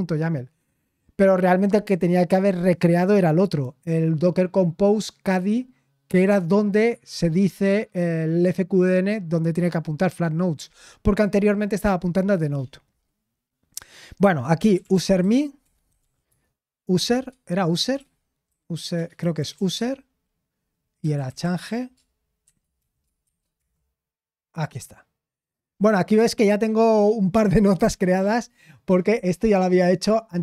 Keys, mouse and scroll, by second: 13.9 click, 14.4-16.5 typing, 17.1 shift+Tab, 17.9-23.7 typing, 25.4-26.1 typing.